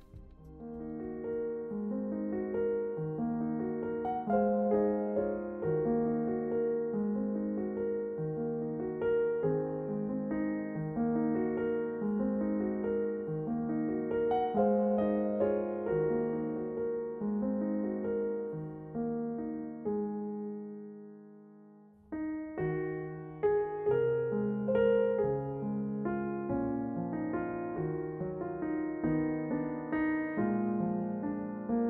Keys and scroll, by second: 1.1 e, 5.9 e, 9.9 e, 13.6 e, 16.3 e, 20.3 e, 24.0 f, 28.5 a, 29.1 f, 31.6 a.